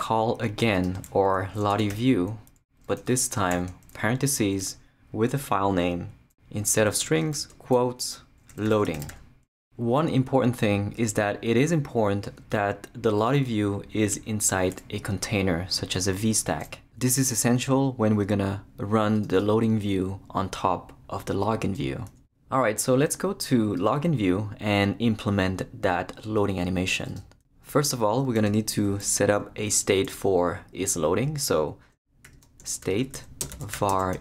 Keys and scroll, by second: 1.5-3.5 typing, 3.4 shift+Return, 4.6 shift+Return, 7.3 shift+', 8.3-9.6 typing, 28.5 Return, 32.0-34.2 typing.